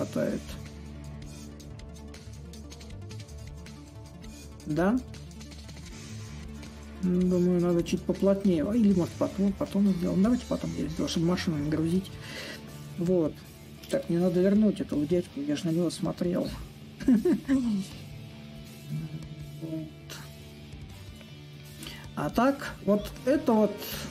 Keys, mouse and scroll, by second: 0.0-1.5 shift+drag, 2.8-7.8 drag, 8.3-13.3 drag, 15.4-24.1 drag.